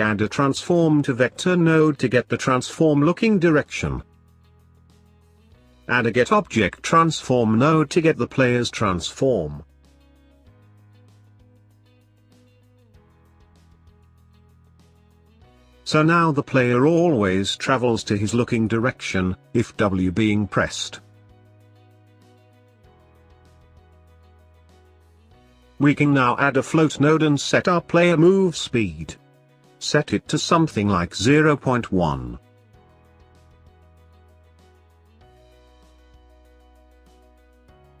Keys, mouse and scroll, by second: 3.2 middle click, 5.2 middle click, 5.3-6.4 drag, 6.4 shift+a, 13.3 click, 14.9-16.1 middle drag, 16.1 click, 19.4 click, 22.0-25.0 middle drag, 25.9 shift+a, 30.7 click, 33.7-36.7 drag, 37.0 click.